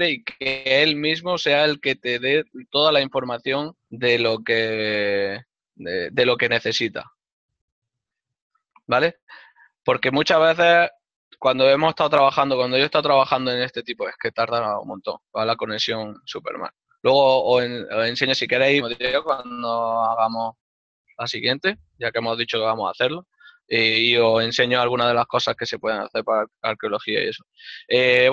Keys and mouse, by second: 1.6 click, 4.7 middle click, 8.1 click, 14.8 click, 21.4 click.